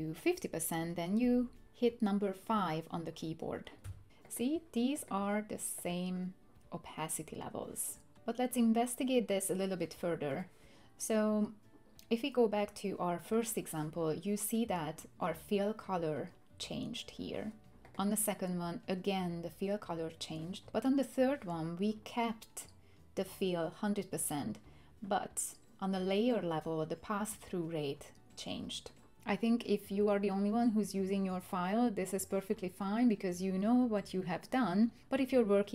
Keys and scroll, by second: 3.8 5.